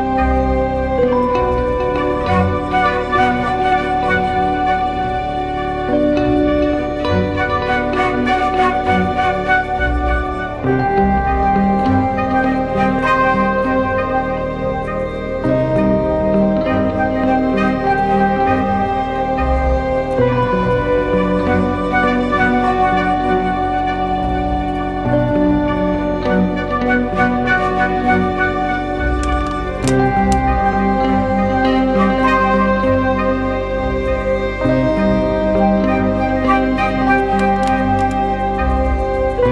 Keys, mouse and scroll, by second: 8.0-8.8 typing, 17.4 typing, 17.8-19.0 alt+scroll up 1, 20.0-20.6 alt+scroll up 1, 21.2 alt+scroll up 1, 22.0 ctrl+h, 38.0 ctrl+t.